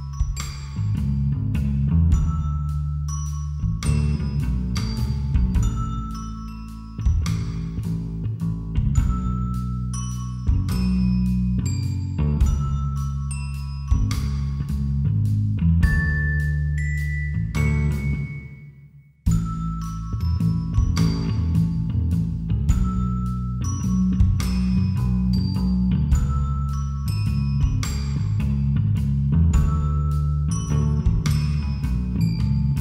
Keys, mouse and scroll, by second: 5.4-10.6 middle drag, 11.0 click, 11.2-12.6 drag, 18.0-22.4 right drag, 22.7 click, 23.4-26.6 drag.